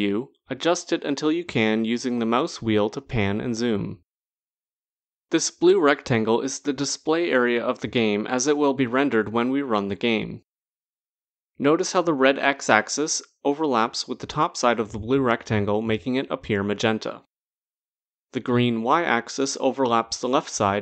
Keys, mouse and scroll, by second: 3.4-3.8 scroll, 4.1-6.0 scroll, 6.0-7.3 scroll, 7.3-7.8 scroll, 8.2 click.